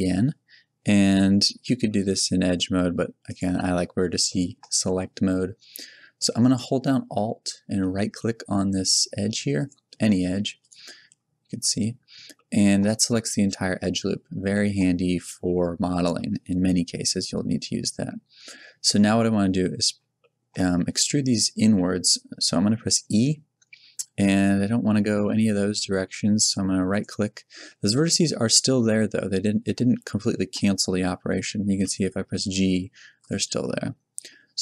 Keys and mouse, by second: 10.2 a, 11.8 middle click, 14.7 middle click, 23.1 e, 27.0 click, 27.9-31.7 middle drag, 31.7 g, 33.8 middle click.